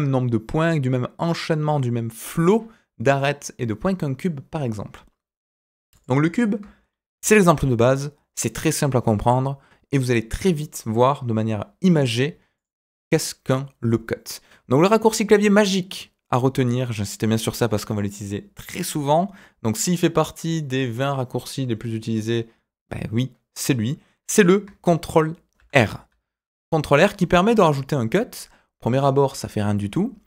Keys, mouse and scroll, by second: 3.5 Tab, 5.6 Delete, 5.9 click, 7.1 alt+g, 11.8 Tab, 12.5 click, 25.5 ctrl+r.